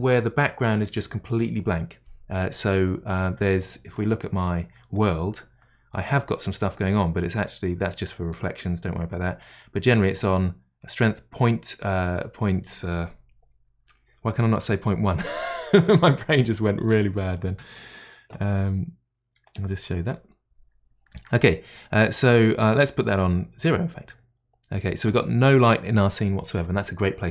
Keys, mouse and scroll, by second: 3.9-5.6 drag, 5.6-7.5 middle drag, 7.5-7.8 scroll up 3, 9.0 scroll up 6, 9.6-13.8 middle drag, 23.6-27.3 drag.